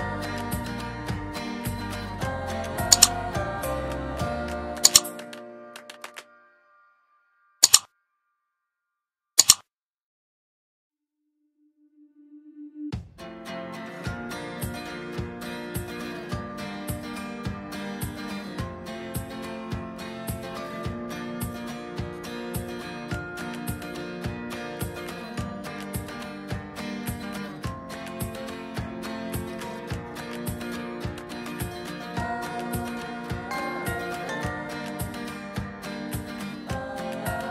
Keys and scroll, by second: 2.8 space, 37.1 ctrl+z.